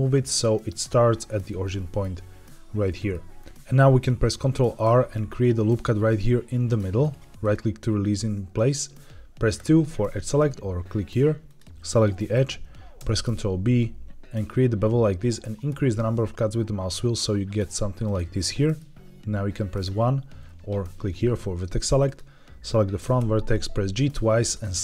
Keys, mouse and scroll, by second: 0.2 click, 1.4 middle click, 2.8 middle click, 3.3 scroll down 1, 4.8 ctrl+r, 7.3 right click, 9.5 2, 11.4 click, 12.1 middle click, 12.9 ctrl+b, 14.3 scroll up 1, 15.3 scroll down 1, 15.9-17.3 scroll up 1, 17.9 click, 18.3 middle click, 18.6 middle click, 19.8 1, 21.9 click, 22.9 g, 23.1 g, 24.4 click.